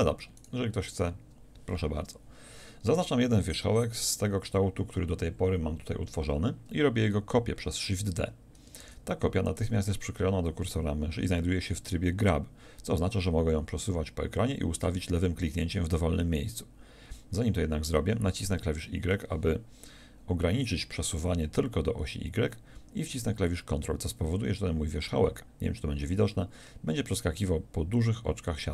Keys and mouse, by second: 0.4-8.8 middle drag, 8.8 shift+d.